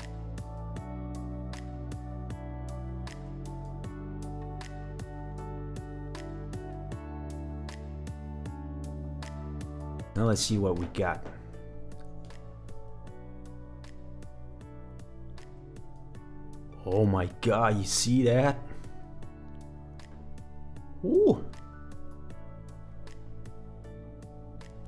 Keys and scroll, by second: 0.3 super+v, 5.2 super+v, 9.0 super+v, 9.8 super+v, 9.9 super+s.